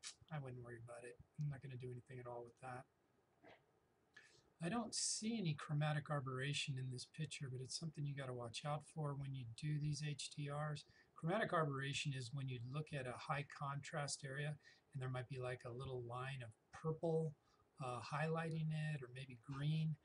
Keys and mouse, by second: 2.5 click.